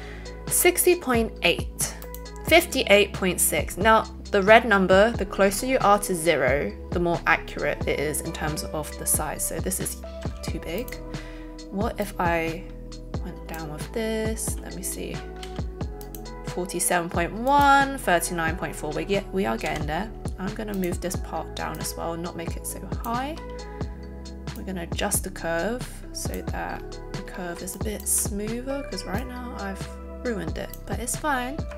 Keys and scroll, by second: 10.3 a, 19.7 z.